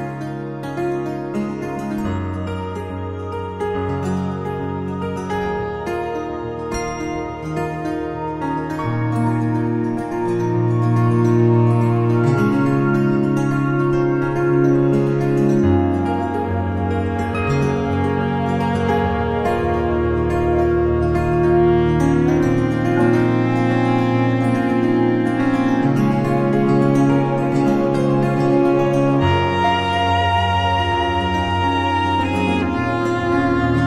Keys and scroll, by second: 1.0 space, 2.6 u, 21.6 Return, 23.0 space, 24.3 Return, 24.9 v, 25.9 ctrl+t, 31.8 Return, 32.9 ctrl+j.